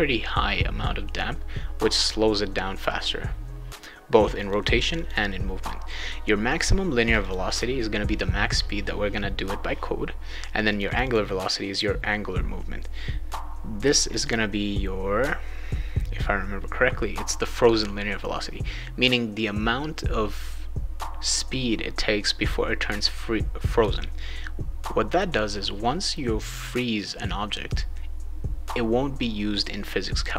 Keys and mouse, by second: 4.4 click, 4.9 click, 6.4 click, 7.0 click, 7.2 click, 7.4 click, 10.7 click, 10.9 click, 11.0 click, 14.0 click, 14.2 click.